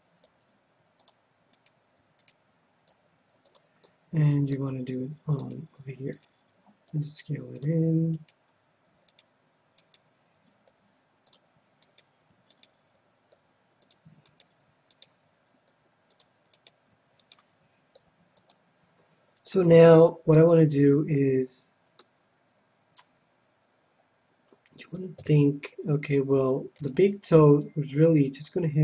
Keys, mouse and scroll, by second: 0.4 s, 1.0-2.7 drag, 1.5-3.9 right drag, 3.0 s, 3.5-5.1 drag, 3.9-5.4 middle drag, 5.4-7.6 right drag, 6.8 s, 7.6-9.2 drag, 8.2-11.5 right drag, 10.7 s, 11.3-13.0 drag, 11.9-14.2 right drag, 13.3 s, 13.9-15.6 drag, 14.4-18.9 right drag, 15.7 s, 16.2-18.1 drag, 17.9 s, 18.5-20.0 drag, 19.4-21.4 middle drag, 21.6 middle click, 25.1 KP_7, 26.8 ctrl+r, 28.5-28.8 drag.